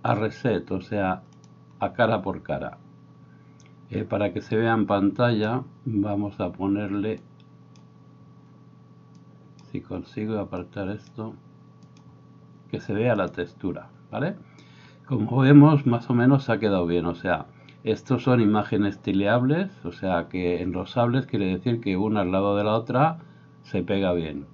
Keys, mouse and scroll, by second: 4.6-17.8 drag, 4.6-17.8 middle drag, 21.8-24.5 drag, 21.8 middle click, 21.8 right click.